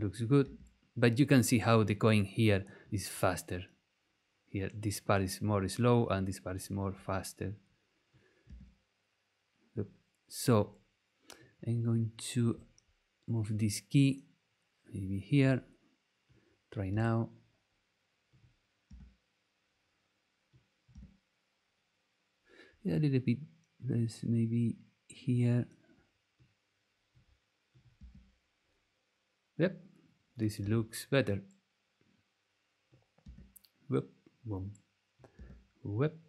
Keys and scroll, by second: 0.4 space, 8.5 space, 16.9 space, 18.8 space, 20.9 space, 28.0 space, 30.6 space, 33.2 space, 35.3 space.